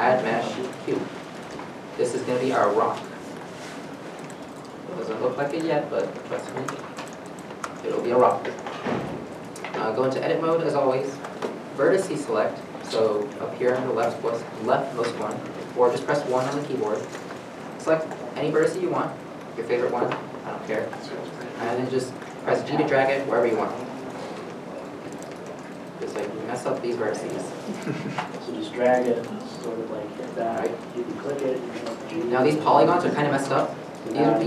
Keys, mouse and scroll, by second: 1.4 middle click, 1.4-3.3 scroll up 1, 3.3 middle click, 7.4 middle click, 8.7-9.6 scroll down 1, 9.6 shift+middle click, 10.2 Tab, 10.9 middle click, 16.3 middle click, 16.4 1, 19.8 1, 19.8 middle click, 22.0 g, 24.3 g, 25.1 middle click, 25.4 g, 26.3 middle click, 27.0 g, 27.6 middle click, 28.5 g, 29.3 middle click, 30.3 scroll down 1, 30.9 middle click, 33.0 middle click.